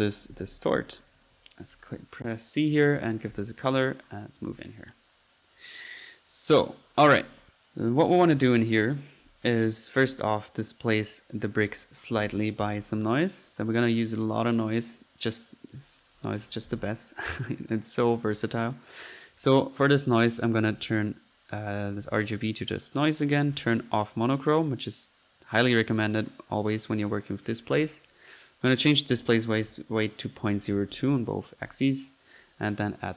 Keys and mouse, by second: 1.1-3.5 typing, 3.1-3.5 drag, 3.8 middle click, 4.8 click, 5.6-6.5 drag, 6.8 click, 7.3 Delete, 7.7 click, 11.1-11.5 right drag, 11.5 click, 11.9-12.7 typing, 13.3 click, 13.8-14.1 drag, 14.3-14.6 drag, 14.7 click, 16.3-17.3 typing, 17.5-17.9 drag, 18.3-18.8 drag, 20.4 drag, 20.7-21.0 drag, 22.0 drag, 22.6 click, 23.5 click, 24.1 middle click, 25.7 drag, 26.7 click, 28.9-29.2 drag, 32.3-33.1 drag.